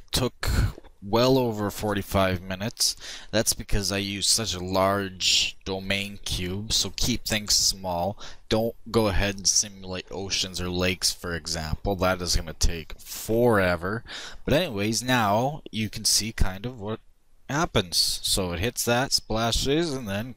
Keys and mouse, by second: 16.0-17.8 drag.